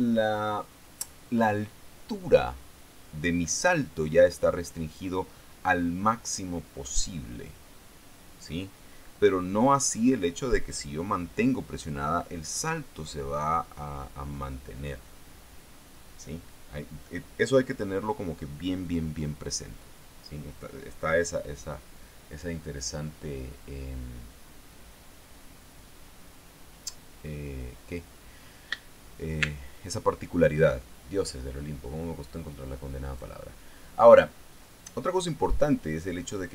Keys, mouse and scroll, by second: 33.6 click.